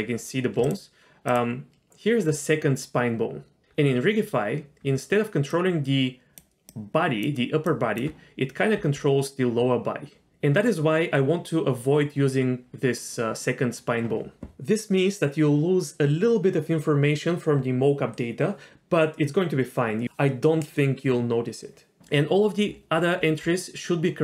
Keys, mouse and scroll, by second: 0.6 click, 1.3 click, 3.6 ctrl+z, 3.6 click, 3.6 d, 4.8-8.8 typing, 5.5 click, 6.7 click, 7.7 click, 22.0-24.2 scroll down 12.